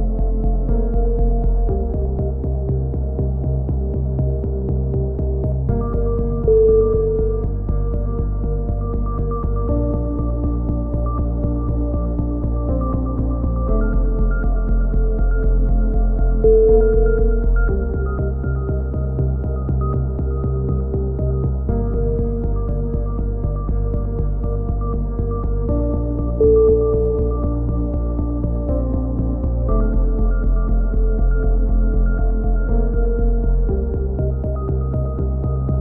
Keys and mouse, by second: 0.3 a, 0.5-3.4 drag, 2.3-4.9 right drag, 3.4 f, 3.6 a, 4.6 f, 4.7 a, 4.9-6.4 drag, 6.0-6.9 right drag, 6.4 a, 6.9 ctrl+r, 7.5 click, 9.1-10.1 right drag, 9.1 f, 9.9 f, 10.1 a, 11.0-13.9 right drag, 12.3 f, 12.3 a, 13.0 ctrl+z, 13.7 f, 13.9 a, 14.3-14.8 right drag, 18.2 KP_3, 25.7-26.3 drag, 29.4 a, 29.5 z, 29.6 z, 31.7-33.0 drag.